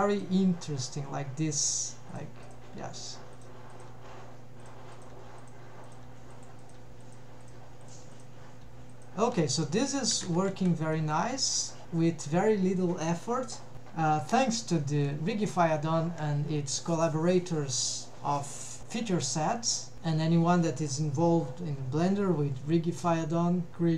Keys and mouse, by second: 0.4 g, 2.5 click, 2.8 g, 3.4 click, 4.0 g, 5.5 click, 5.5-6.9 g, 5.9 click, 6.4 click, 7.1 click, 7.7 g, 8.7 g, 9.4 middle click, 10.2 a, 10.5 alt+q, 10.7 alt+q, 11.0 middle click, 11.5 middle click, 14.9 middle click.